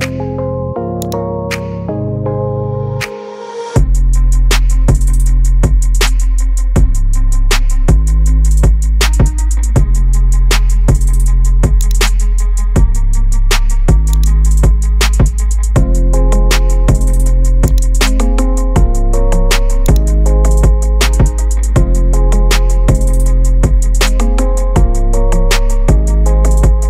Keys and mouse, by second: 1.1-4.5 drag, 5.3 middle click, 6.4 space, 8.3 space, 12.3 r, 14.2 click, 14.5 r, 18.6 space, 19.9 click, 20.6-21.9 middle drag, 22.7 shift+drag, 23.7 space.